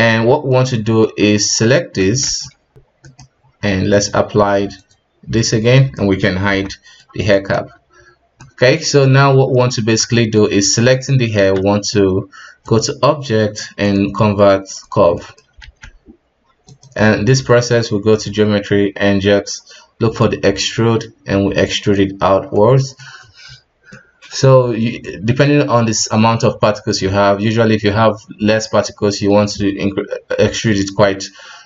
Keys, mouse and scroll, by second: 0.4-1.5 scroll up 4, 1.5 right click, 2.2 ctrl+s, 2.7 scroll up 4, 3.0 right click, 3.9 click, 4.8 click, 5.7 right click, 6.4 h, 6.7-7.3 middle drag, 7.3 right click, 7.5 KP_1, 8.4-11.5 middle drag, 11.5 q, 12.6-15.1 drag, 15.1-15.6 middle drag, 15.6 alt+a, 16.6 click, 17.7-18.0 drag, 18.0-20.1 scroll down 1, 20.1 scroll down 4, 20.1-22.5 drag, 22.5-23.4 middle drag, 23.4-23.9 scroll up 1, 23.9-24.8 middle drag, 24.8 scroll down 1, 25.0-29.4 middle drag, 30.6-31.6 middle drag.